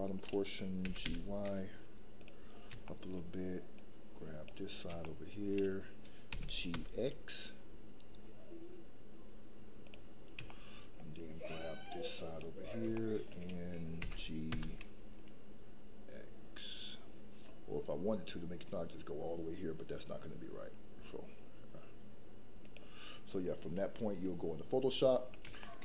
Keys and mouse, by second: 0.8 g, 1.1 y, 2.1 click, 2.9 shift+middle click, 3.7-4.4 drag, 5.1 shift+middle click, 6.3 g, 6.7 x, 9.8 click, 10.5 shift+middle click, 11.4 click, 12.9 shift+middle click, 13.9 g, 14.5 x, 22.6 click, 25.6 shift+middle click.